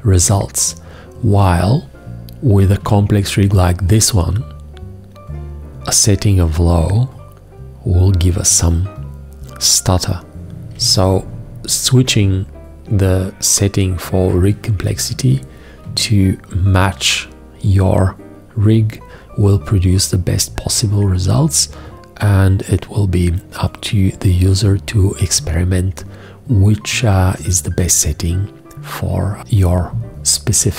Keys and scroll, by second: 10.5 shift+g.